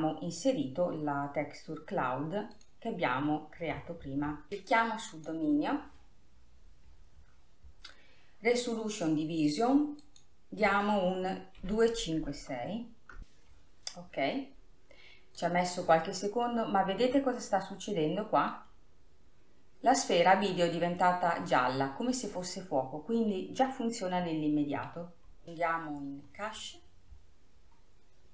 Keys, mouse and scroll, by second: 0.1-1.1 scroll up 2, 1.1-3.1 scroll down 2, 3.1 click, 4.3 scroll up 3, 5.7 click, 7.1-9.3 scroll up 10, 10.6-13.2 drag, 14.4 scroll up 2, 16.0-17.1 drag, 17.1-19.4 middle drag, 19.4-22.2 scroll up 3, 22.5-23.2 scroll down 4, 24.0-25.5 middle drag, 25.7-28.3 scroll down 24.